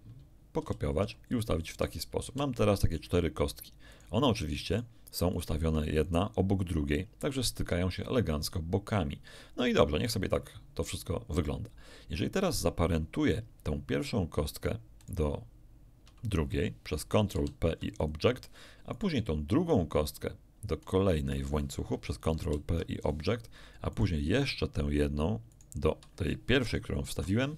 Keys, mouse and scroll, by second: 0.5 ctrl+shift+r, 2.2 shift+z, 3.9 click, 4.7 shift+click, 5.3 shift+click, 6.0 shift+click, 14.9 shift+right click, 17.3 ctrl+p, 17.9 ctrl+click, 18.9 right click, 20.8 shift+right click, 22.3 ctrl+p, 22.9 ctrl+click, 23.9 click, 25.5 shift+click, 26.9 ctrl+p.